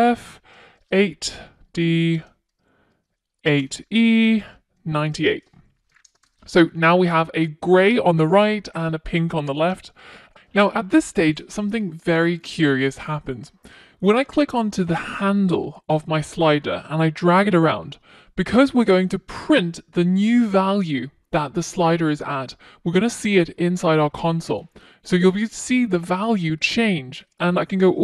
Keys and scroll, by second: 9.6 super+s.